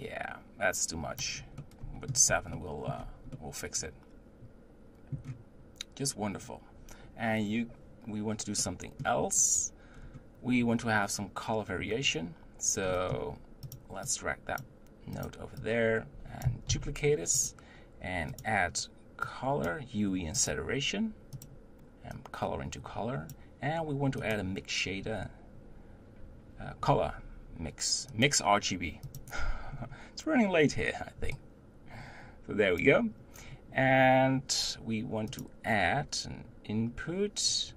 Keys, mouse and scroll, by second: 1.7-13.7 middle drag, 13.7 click, 14.1-15.3 drag, 15.7-16.7 drag, 16.7 shift+d, 18.9-22.5 drag, 29.2 click, 29.8-31.3 scroll up 1, 31.3 scroll up 2, 31.4 drag, 33.5-34.5 scroll down 4, 35.4-37.7 drag.